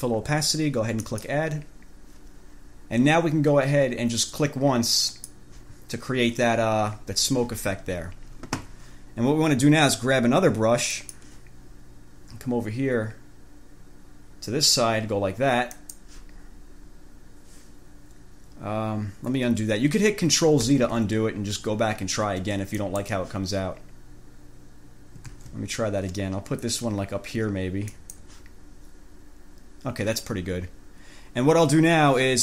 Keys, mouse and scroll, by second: 1.3 click, 5.3 click, 11.1 click, 15.9 click, 20.9 ctrl+z, 23.0 click, 25.5 ctrl+z, 28.1 click.